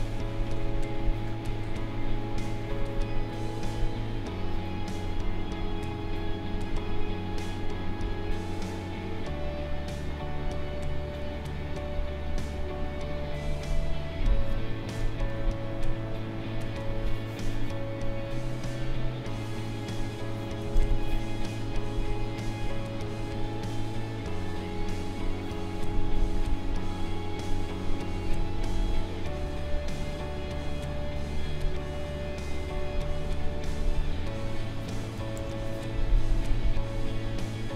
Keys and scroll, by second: 14.9 space, 20.7 ctrl+z, 35.3 ctrl+z.